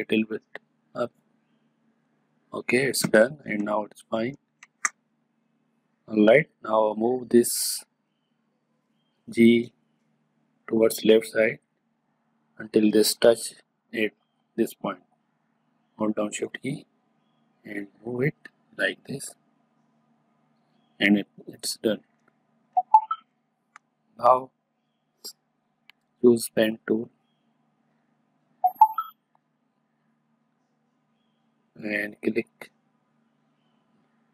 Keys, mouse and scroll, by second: 2.8 space, 3.1 ctrl+click, 4.2 ctrl+click, 7.4 click, 16.3-22.2 drag, 22.2 space, 22.2 click, 22.7 space, 22.9 ctrl+click, 26.6-31.8 drag, 32.4-34.3 drag.